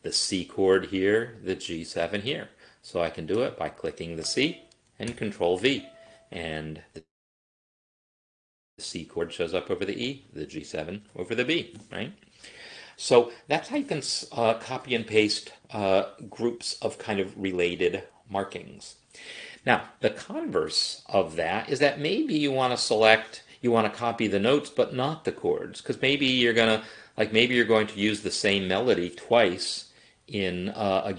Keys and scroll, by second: 5.1 ctrl+v.